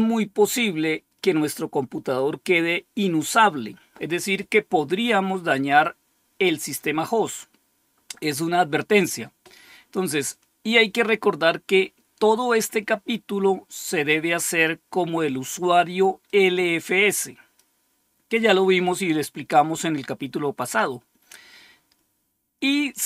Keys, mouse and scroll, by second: 16.2-17.5 drag.